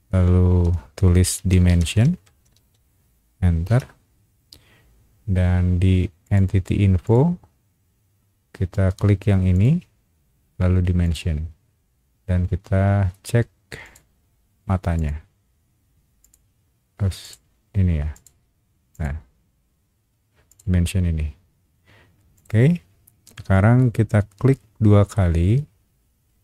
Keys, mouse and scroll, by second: 1.1-3.2 typing, 3.6 Return, 6.2 click, 7.0 click, 9.5 click, 11.0 click, 13.8 click, 14.9 click, 16.2 click, 17.2 click, 18.1 click, 18.9 click, 20.5 click, 22.3 click, 25.1-26.4 middle drag.